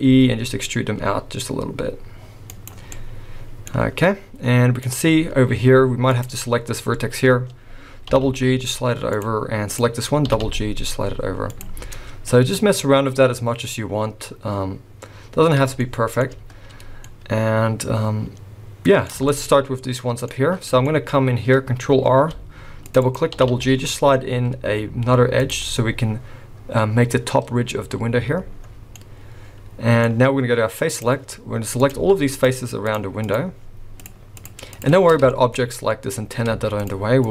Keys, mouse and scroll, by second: 0.1 e, 2.9 middle click, 3.8-4.8 scroll up 1, 4.8 click, 4.8-5.4 scroll up 2, 6.1 click, 6.9 scroll down 1, 8.1 g, 9.7 click, 10.3 g, 11.8-12.3 scroll down 4, 12.3 middle click, 15.8 shift+middle click, 16.9 scroll down 1, 17.0 middle click, 19.3 shift+middle click, 19.6-20.0 scroll up 3, 20.2 middle click, 20.9 shift+middle click, 21.1-21.8 scroll up 1, 22.1 ctrl+r, 23.3 g, 25.6-26.3 scroll up 3, 28.1-28.8 scroll down 4, 29.0 middle click, 30.9 click, 31.8 click, 32.4 shift+click, 32.8 shift+click, 33.2 shift+click, 34.0 click, 34.4 shift+click, 34.7 click, 35.3 shift+middle click, 35.6 scroll up 1, 36.8 shift+click, 37.2 shift+click.